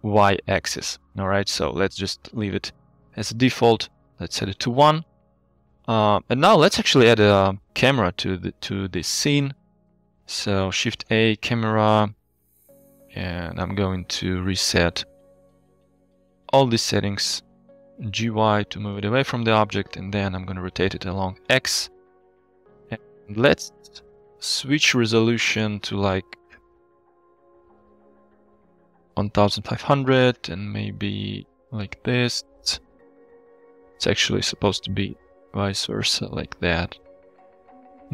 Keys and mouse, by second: 2.3 click, 5.9 middle drag, 6.8-7.2 middle drag, 7.7 shift+middle drag, 9.5 click, 9.8 shift+a, 12.6 n, 13.7 click, 14.9-17.1 drag, 18.2 g, 18.3 y, 19.1 click, 20.4 r, 20.6 x, 21.3 9, 21.3 0, 21.8 Return, 25.8-29.1 middle drag, 28.3 KP_0, 30.3-31.6 drag, 32.6-33.4 middle drag, 33.6 drag, 33.6 middle drag, 33.8 click, 33.8-34.2 middle drag, 34.9-37.4 drag, 36.1 KP_0, 37.1 KP_0.